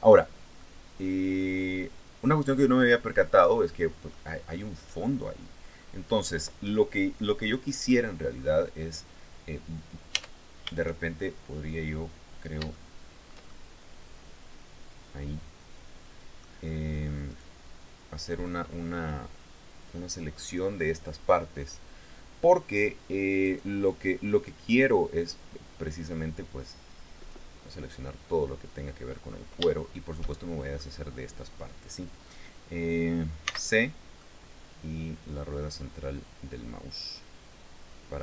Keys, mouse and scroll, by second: 0.1-3.8 drag, 4.3 right click, 5.2-5.6 scroll down 2, 5.9 scroll up 2, 7.4-7.8 scroll up 2, 7.9-8.2 scroll down 2, 9.7 Tab, 12.2-16.2 shift+middle drag, 16.8 right click, 17.8 right click, 23.0 click, 26.8 click, 29.3-30.5 shift+middle drag, 33.0 c, 33.7-37.9 middle drag, 37.8 Escape, 38.0 click.